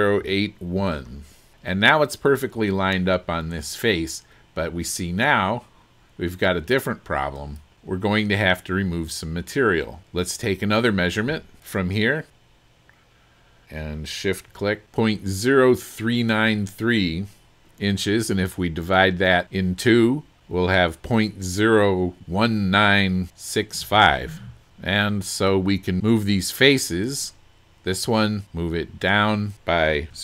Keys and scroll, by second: 0.0-0.8 typing, 30.1-30.2 typing.